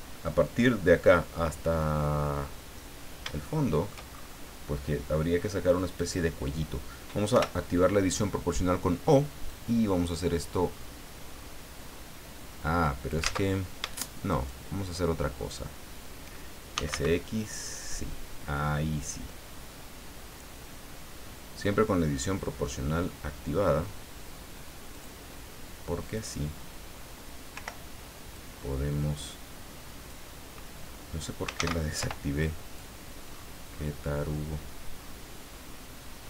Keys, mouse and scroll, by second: 3.4 shift+middle click, 4.1-4.5 shift+scroll up 3, 6.0 right click, 7.3 o, 9.5 click, 10.6-12.1 scroll up 6, 13.2 ctrl+z, 13.8 ctrl+shift+z, 14.3 shift+right click, 16.5-17.4 typing, 18.6-19.1 scroll down 2, 20.1-20.5 scroll down 2, 20.9 scroll down 2, 24.9 click, 26.0 right click, 27.5 o, 28.3-30.3 drag, 31.6 ctrl+z, 32.0 ctrl+o, 32.7 click, 33.3-34.4 scroll up 6, 34.9-35.3 scroll up 2.